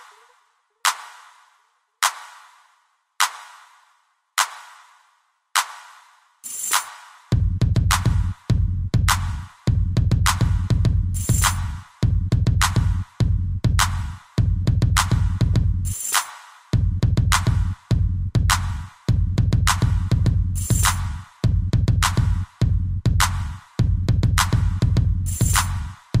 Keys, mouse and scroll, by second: 0.0 click, 1.5 click, 2.6 click, 4.6 click, 5.4 click, 5.5 click, 7.0 Escape, 7.5 middle click, 9.7 click, 9.8 click, 10.2-10.5 scroll down 2, 10.8 ctrl+c, 11.5 ctrl+shift+v, 12.1 middle click, 13.5 middle click, 14.7 click, 16.0 b, 16.4 click, 17.4 b, 17.6 click, 18.7 click, 20.7 b, 20.8 middle click, 22.0 i, 22.6 click, 22.7 click, 23.0 middle click, 23.7 scroll up 2, 24.1 shift+middle click, 24.7 scroll down 1, 25.0 middle click.